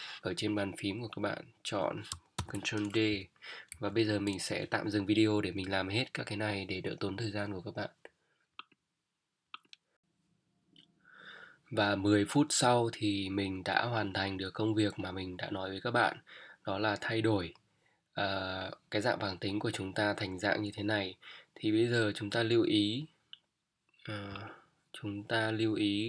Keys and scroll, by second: 2.4 ctrl+d, 3.1 ctrl+Down, 3.6 Down.